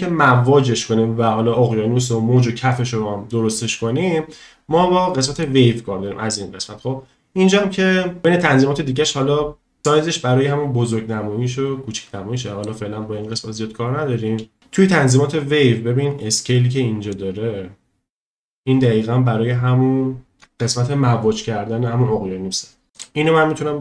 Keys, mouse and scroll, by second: 5.4 click, 9.8-11.3 drag, 9.8 space, 11.3-12.6 middle drag, 14.5 space, 17.1-20.3 drag, 23.0-23.8 drag.